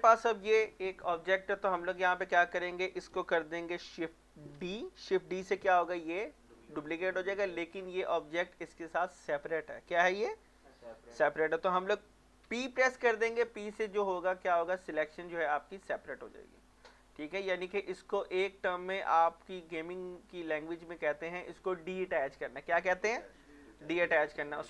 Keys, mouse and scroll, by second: 0.4-1.3 scroll up 1, 1.3 middle click, 1.7-2.0 scroll down 1, 2.0 middle click, 2.5-3.0 scroll up 1, 3.0 middle click, 4.5 shift+d, 7.1 Escape, 7.5 scroll down 1, 7.8 middle click, 8.3 shift+middle click, 12.4 p, 15.5 click, 17.0 Tab, 18.0-22.9 drag.